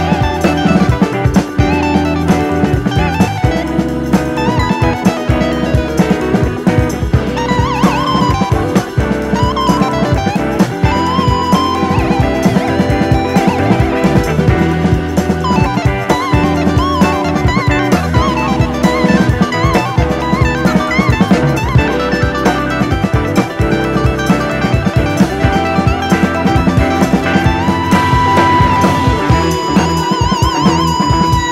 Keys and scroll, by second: 5.9 d, 7.3 d, 9.9 typing, 12.4-13.2 typing, 18.3 super+z, 21.3 Right, 28.5 BackSpace, 30.0 super+c, 30.1 super+v.